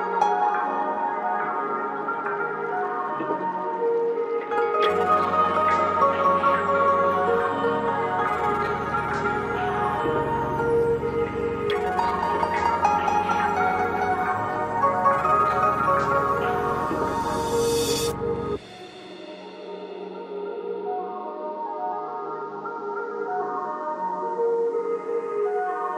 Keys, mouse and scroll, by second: 2.2 click, 2.7 scroll down 1, 4.0-11.6 drag, 11.6-12.0 scroll up 1, 13.6 click, 14.8 g, 15.2-17.0 drag, 24.6 click.